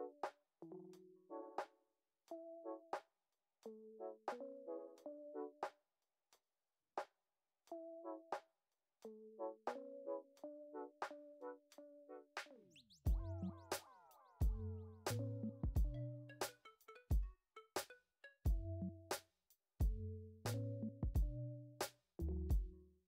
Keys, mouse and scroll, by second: 0.4 click, 0.6 middle click, 0.9 g, 1.4 click, 1.5 g, 2.4 click, 3.0 g, 3.4 click, 3.6 g, 4.1 g, 4.4 click, 4.8 middle click, 5.1 g, 5.6 Tab, 5.8 scroll down 4, 6.0 drag, 6.2-7.1 middle drag, 7.1 scroll up 4, 7.4 middle click, 7.6 Tab, 7.8 click, 8.1 middle click, 8.9 click, 9.6 click, 10.8 g, 11.4 g, 11.9 click, 11.9 g, 12.9 click, 14.1 g, 14.6 g, 15.4 click, 15.8 g, 17.1 ctrl+z, 17.3 middle click, 18.1 click, 18.5 click, 18.9 click, 19.2 click, 19.6 middle click, 20.1 click, 20.5 click, 21.3 click, 21.6 click, 22.1 middle click, 22.9 click.